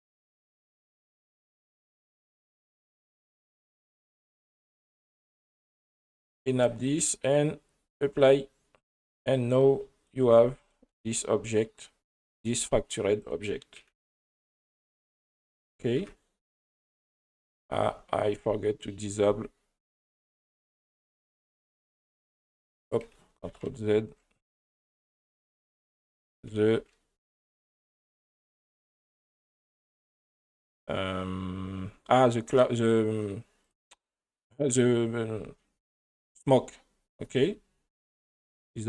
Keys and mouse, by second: 0.7 click, 2.6-3.1 drag, 3.1 middle drag, 5.7 click, 6.2-8.2 drag, 9.6 right click, 10.6 right click, 12.3 click, 13.8 Tab, 15.7 Tab, 16.0 Tab, 16.5 middle click, 17.8 Tab, 22.7 right click, 23.8 ctrl+z, 24.1 ctrl+z, 24.5 ctrl+z, 25.1 ctrl+z, 26.2 ctrl+z, 26.5 ctrl+z, 26.8 ctrl+z, 28.4 ctrl+z, 28.8 ctrl+z, 29.1 ctrl+z, 29.4 ctrl+z, 29.7 ctrl+z, 33.6 click, 37.4 right click, 38.3 click.